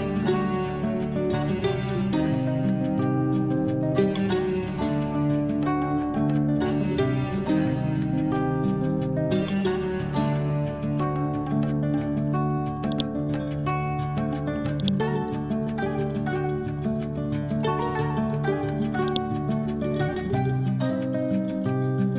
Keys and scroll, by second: 4.1-5.3 typing, 8.9 h.